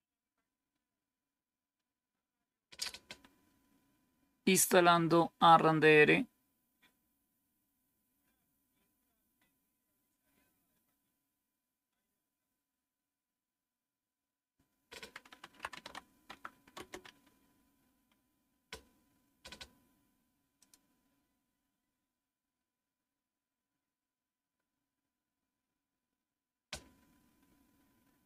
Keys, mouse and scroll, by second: 15.0-16.2 typing, 16.6 Return, 20.5 click.